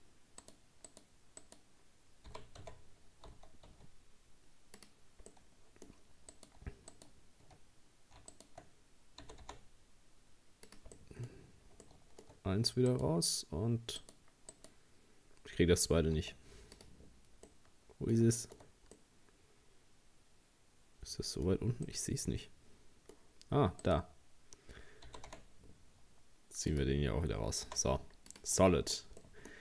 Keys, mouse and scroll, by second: 0.4 right click, 0.9 right click, 1.4 right click, 2.3 g, 5.3-6.3 middle drag, 6.3 right click, 6.9 shift+right click, 8.3 shift+right click, 9.2 g, 11.0 middle click, 11.3-11.9 scroll up 2, 11.9 shift+middle click, 12.4-12.7 scroll up 1, 12.9 right click, 14.0 right click, 14.5 right click, 16.2 z, 17.5-23.8 middle drag, 23.8 right click, 25.1 g, 27.7 z, 28.6 Tab, 28.9-29.2 scroll down 2, 29.2 middle click.